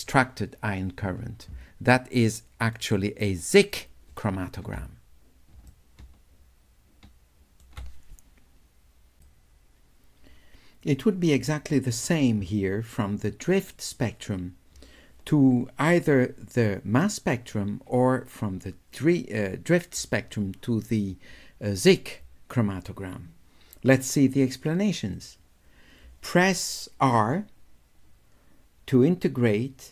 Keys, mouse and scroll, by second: 2.3 click, 3.3 click, 5.7 shift+click, 5.9-7.7 shift+middle drag, 9.2 click, 25.2 click.